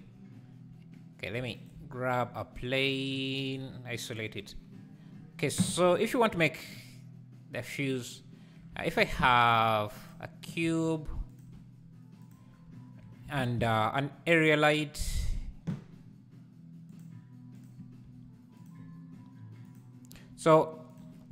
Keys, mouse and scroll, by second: 1.6 shift+right click, 1.8 shift+a, 7.9 click, 8.8 shift+right click, 9.0 shift+a, 10.7 s, 11.5 g, 12.5 scroll down 2, 18.1 g, 19.7 click, 20.3 r.